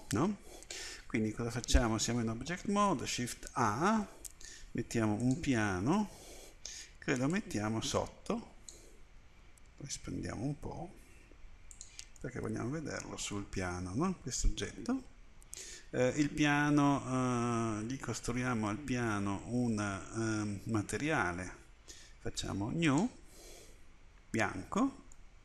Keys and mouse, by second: 1.2-2.9 middle drag, 2.9 shift+a, 7.3-9.4 drag, 9.4 s, 12.2-15.3 middle drag, 15.4 middle click, 15.4-25.4 drag.